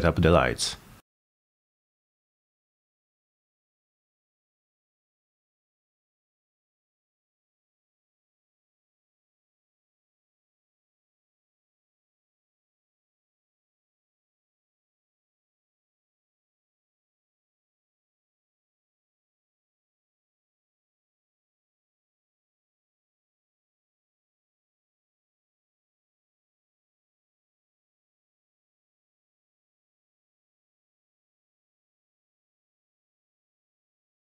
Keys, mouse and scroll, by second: 0.4 click, 1.9 click, 2.4 click, 2.9 drag, 4.4 click, 6.6 middle click, 7.2 click, 8.3 click, 8.7 click, 9.1-12.2 typing, 9.3 Return, 9.9 Return, 11.0 Return, 12.5 click, 12.9 click, 13.6 1, 14.5 click, 15.0 click, 15.2-18.5 typing, 18.7 click, 19.0 click, 19.5 Return, 20.3 click, 20.9 2, 21.1 Return, 21.6 click, 22.2 3, 22.4 Return, 23.0 click, 23.5 click, 23.5-24.4 typing, 24.8 Return, 25.5 click, 25.9 click, 26.3 click, 26.5 5, 26.8 Return, 27.4 click, 27.9 click, 28.5 click, 28.8 click, 29.4 click, 29.7 click, 30.3 click, 30.7 click, 31.1 click, 31.6 click.